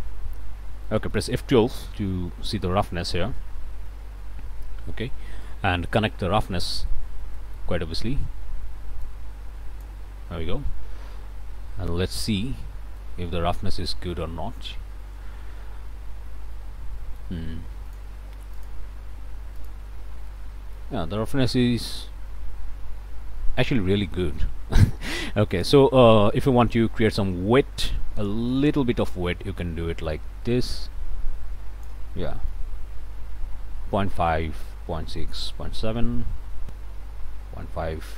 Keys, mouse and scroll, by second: 0.9 click, 1.9 F12, 5.4 click, 6.3 scroll up 1, 6.4 click, 7.0-7.3 scroll up 1, 7.3 click, 9.0-10.0 drag, 12.5-12.8 scroll up 2, 12.9 click, 13.4 scroll up 2, 13.8-16.4 drag, 16.4 middle click, 16.5 click, 17.8 click, 18.5 click, 19.5 click, 20.3 click, 21.3-24.3 drag, 25.5 click, 27.1-32.0 drag, 32.5-38.1 ctrl+right drag.